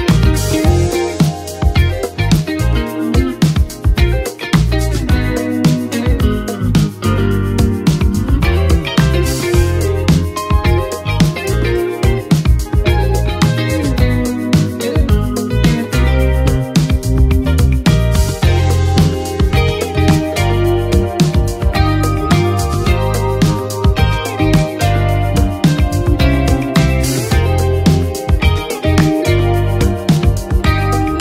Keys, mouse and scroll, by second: 0.0 ctrl+d, 1.8-6.9 drag, 8.9 s, 10.5 click, 10.8 s, 12.1 click, 12.5 right click, 14.0-18.6 drag, 18.9 space.